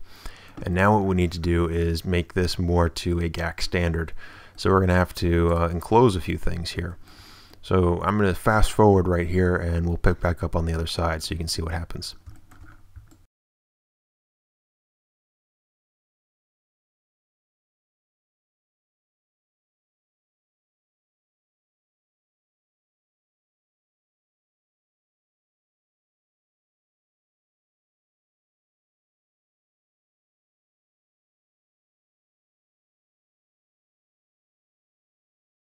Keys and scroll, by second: 5.7 Tab, 13.6 ctrl+f, 13.7 a, 14.5 a, 15.4 shift+a, 16.4 ctrl+f, 16.5 a, 17.8 shift+a, 18.0 shift+super+z, 18.6 a, 19.2 shift+f, 20.4 shift+f, 21.6 shift+f, 23.3 shift+super+f, 25.8-29.1 typing, 30.2-32.9 typing, 34.7 shift+f.